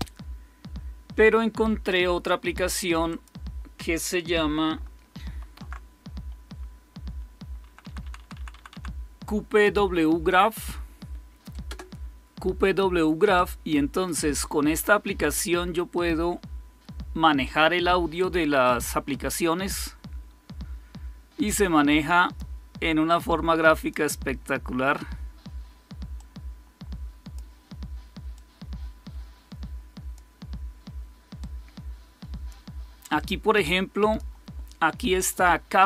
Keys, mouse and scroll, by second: 3.0 click, 3.3 click, 5.2 alt+super+r, 7.6 Down, 7.9 Down, 11.6 Return, 21.3-22.3 drag, 23.1 click, 24.5 click, 26.1-27.3 drag, 28.3-30.1 drag, 31.3-32.4 drag, 32.8-34.6 drag, 35.2 click.